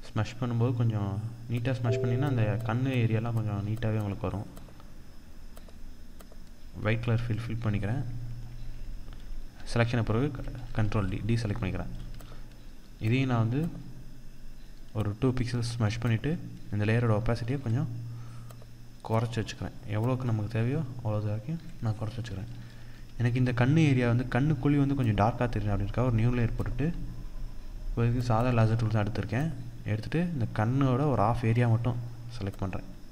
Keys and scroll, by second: 1.1 BackSpace, 9.3 ctrl+d, 10.3 ctrl+-, 17.1 ctrl+0, 21.7 ctrl+=, 27.9 ctrl+=, 29.6 ctrl+=.